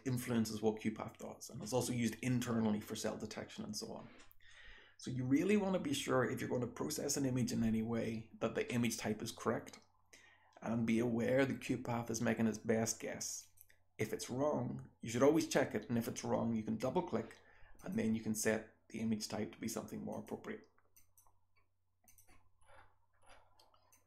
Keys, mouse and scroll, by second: 13.2 click, 13.4 click, 22.1 click, 22.6-24.0 scroll down 2, 24.0 click, 24.0 scroll down 1.